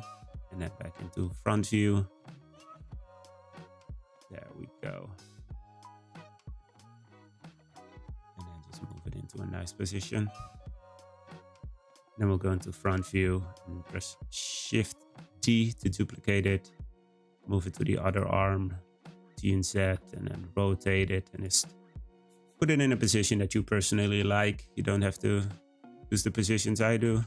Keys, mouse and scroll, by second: 0.5 z, 1.5 `, 2.7 r, 4.3-5.1 middle drag, 5.1 g, 6.3 middle click, 7.3 r, 9.1-9.4 scroll down 4, 9.4 middle click, 10.1-10.7 scroll up 1, 10.7-12.1 shift+middle drag, 15.2 shift+d, 18.7 g, 19.7 r, 22.0 scroll up 2, 22.3-23.8 middle drag, 23.8 g, 26.3 middle click, 26.9 g.